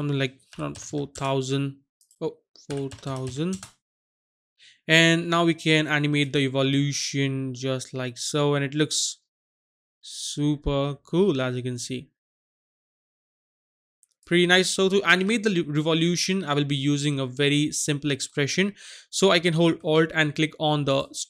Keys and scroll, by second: 0.7 KP_0, 0.8 KP_0, 1.1 Return, 2.7 KP_4, 2.8 KP_0, 3.0 KP_0, 3.2 KP_0, 3.5 Return.